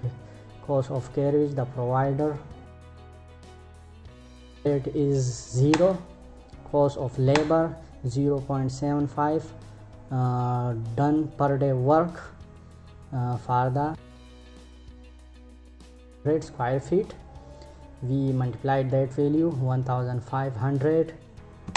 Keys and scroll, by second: 5.2 Return, 6.8 Return, 21.2 Return.